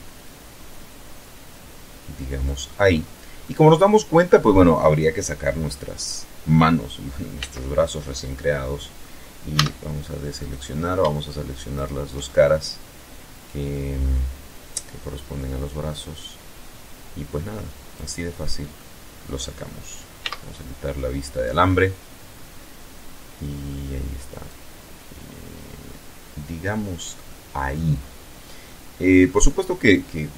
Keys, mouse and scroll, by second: 1.5 click, 1.9-2.3 scroll down 2, 2.5-3.4 middle drag, 6.4 z, 8.5 a, 9.4 right click, 10.7 shift+right click, 11.2-12.9 shift+middle drag, 13.0 scroll down 2, 13.6-17.1 drag, 17.1-17.9 middle drag, 18.3-18.7 scroll up 2, 19.1 z, 20.4 scroll down 2, 20.7-22.9 middle drag, 23.4-26.1 drag, 26.2-26.9 middle drag, 27.6-28.4 middle drag, 28.4 scroll down 1, 28.9-29.6 middle drag, 29.7 scroll up 1.